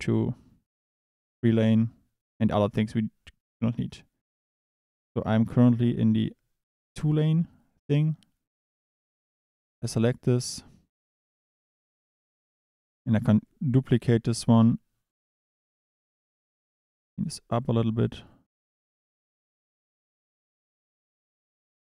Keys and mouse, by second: 8.5-9.9 drag, 12.1 click, 13.1 click, 13.9 shift+d, 15.7 drag, 16.8 click, 17.6 drag, 19.6 drag.